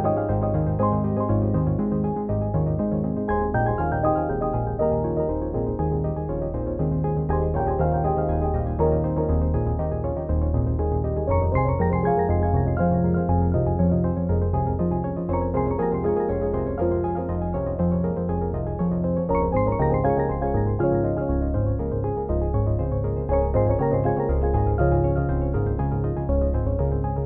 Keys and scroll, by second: 2.2 ctrl+d, 10.9 ctrl+g, 17.9 ctrl+0.